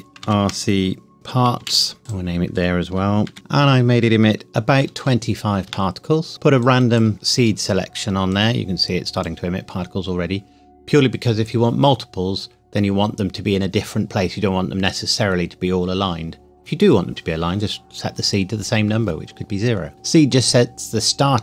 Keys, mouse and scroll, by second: 0.0-1.6 typing, 2.0 KP_Enter, 2.1 click, 3.3 shift+r, 3.3 click, 4.8 KP_2, 5.0 KP_5, 5.7 KP_Enter, 6.7 click.